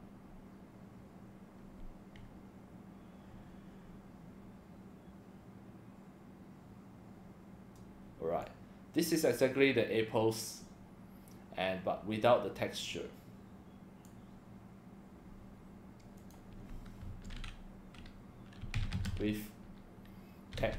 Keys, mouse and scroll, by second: 8.4-14.0 drag, 16.2 click, 17.0 space, 18.4-20.7 typing.